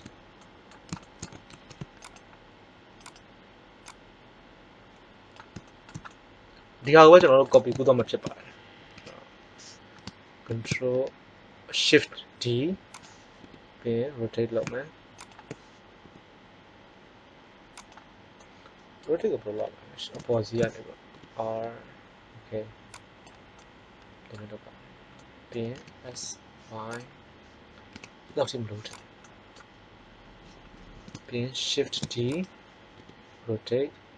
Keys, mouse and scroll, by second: 1.5 ctrl+Tab, 2.9 click, 3.3-5.6 drag, 5.6-6.8 middle drag, 7.9 ctrl+l, 8.8 KP_1, 10.5 shift+d, 13.4 r, 15.9 g, 17.9-19.4 drag, 18.3-19.4 middle drag, 19.5 KP_7, 21.0 r, 23.5 middle click, 25.6 s, 27.8 s, 30.4 KP_7, 31.8 shift+d, 32.9 r.